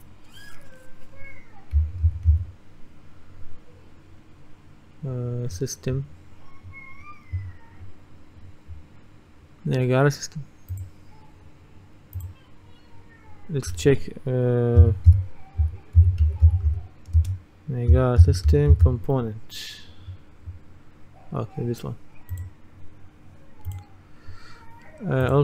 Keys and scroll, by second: 1.6-2.9 typing, 14.9-19.4 typing.